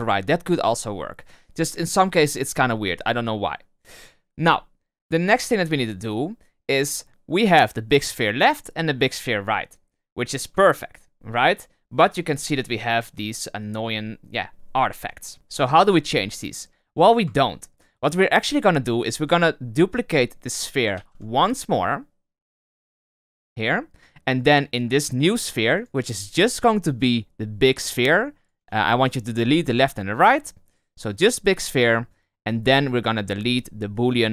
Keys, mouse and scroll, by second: 4.3-7.1 middle drag, 8.1 click, 9.7 middle drag, 10.0-10.6 scroll up 7, 10.6-12.2 shift+middle drag, 12.2 scroll up 3, 12.7 scroll down 1, 15.3-15.7 scroll up 3, 16.6-17.3 scroll down 6, 17.3-19.2 shift+middle drag, 19.2 click, 22.0 shift+d, 25.5 click, 25.7-28.8 drag.